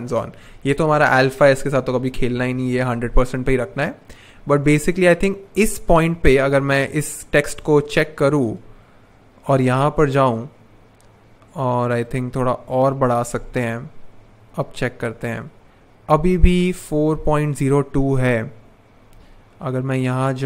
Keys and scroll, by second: 0.8 shift+Down, 1.0 shift+Down, 1.2 shift+Down, 1.7 shift+Up, 1.9 shift+Up, 2.1 shift+Up.